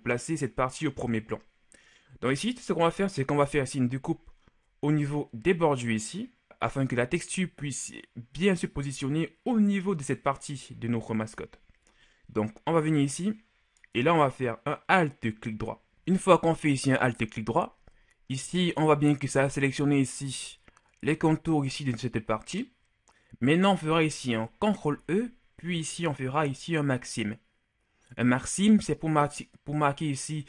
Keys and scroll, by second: 25.2 ctrl+e.